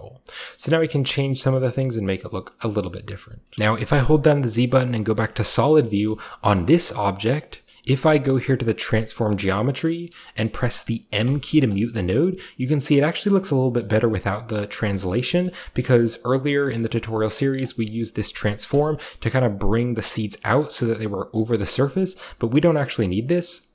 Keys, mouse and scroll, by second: 0.0-1.5 scroll down 1, 0.5-0.9 shift+middle drag, 0.7 typing, 1.0 middle drag, 1.5 middle drag, 1.5-2.5 scroll up 1, 2.5 middle click, 2.5-3.3 scroll up 1, 3.3-5.7 typing, 3.3 scroll up 1, 3.4 scroll down 1, 3.5 middle click, 5.2 middle click, 5.4 middle click, 5.4-7.2 scroll up 1, 5.8 middle drag, 6.1-7.2 shift+middle drag, 7.2-11.0 scroll up 1, 7.4-11.0 middle drag, 7.7 typing, 8.2-11.0 drag, 11.8-13.4 scroll down 1, 11.9-14.6 middle drag, 13.8-15.3 typing, 14.6-17.6 scroll up 1, 14.9 middle click, 16.1-16.6 middle drag, 16.8-19.0 middle drag, 17.6 scroll up 1, 17.8-20.6 drag, 18.1 typing, 20.6-22.1 shift+middle drag, 22.1 shift+click, 23.2-23.7 scroll down 1, 23.3-23.7 middle drag.